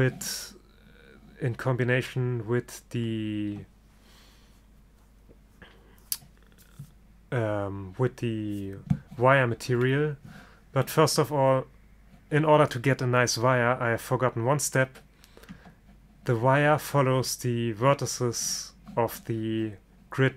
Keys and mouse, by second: 1.1-15.6 middle drag, 15.6 Tab.